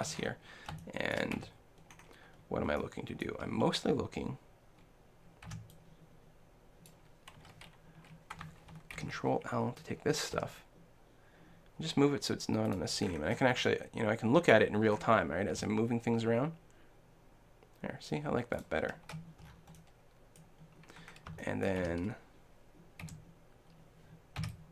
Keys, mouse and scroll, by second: 1.4 a, 5.5 b, 9.0 ctrl+l, 10.4 g, 12.8-14.6 drag, 13.7-16.9 middle drag, 15.5 g, 18.6-20.4 drag, 19.5 middle click, 20.6-23.2 middle drag, 21.9 a, 23.0 l, 24.4 b.